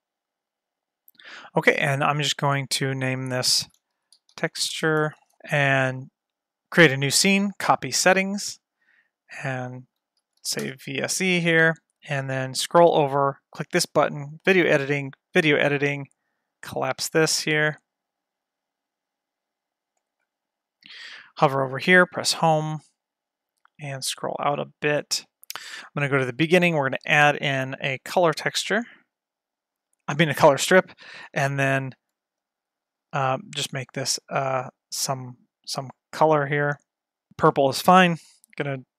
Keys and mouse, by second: 3.0-5.3 drag, 5.1 BackSpace, 5.7-8.1 drag, 9.2-11.2 drag, 12.9 click, 17.1 click, 18.8 click, 22.2 Home, 26.5 click, 27.1 shift+a, 31.2-32.2 drag, 32.6-37.4 drag, 38.2 click.